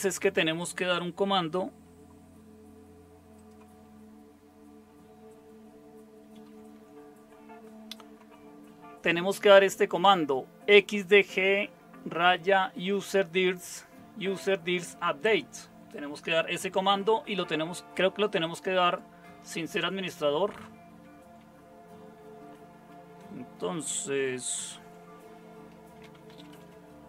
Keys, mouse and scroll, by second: 6.5 super+7, 21.2 Left, 24.6 super+0, 25.8-27.0 typing.